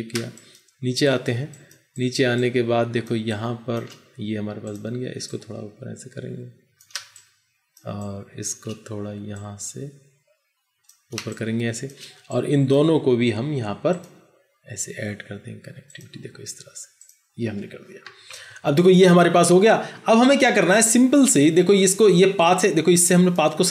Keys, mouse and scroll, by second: 0.1 space, 6.8 space, 6.9 space, 11.0 space, 18.3 ctrl+0.